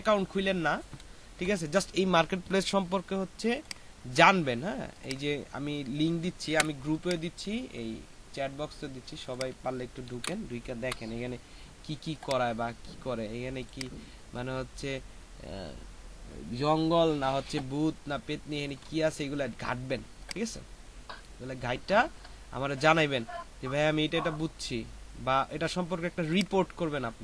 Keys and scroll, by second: 6.5 ctrl+c, 10.1 ctrl+v, 10.6 ctrl+Return.